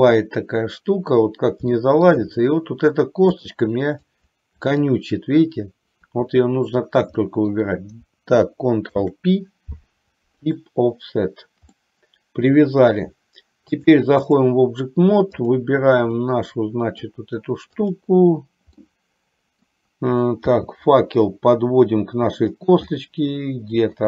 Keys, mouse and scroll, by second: 0.1 shift+click, 1.8 shift+middle click, 3.7 shift+click, 4.9 shift+click, 7.3 middle click, 9.1 ctrl+p, 11.8 middle click, 13.8 click, 15.6 click, 16.2 middle click, 18.1 click, 18.9 middle click, 20.6 g, 23.1 middle click, 23.9 scroll down 1.